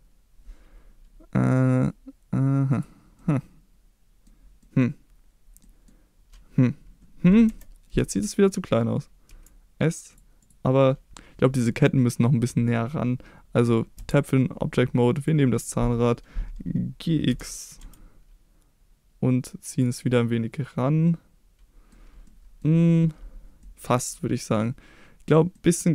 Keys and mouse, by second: 2.7 click, 3.1-4.2 middle drag, 4.6 middle click, 5.7 middle click, 7.4 KP_1, 9.2 s, 10.1 click, 10.4 click, 13.9 Tab, 15.1 click, 17.3 g, 17.8 x, 19.7 click, 20.0-21.9 middle drag, 22.2-22.6 middle drag, 23.6-24.6 middle drag, 25.5-25.9 middle drag.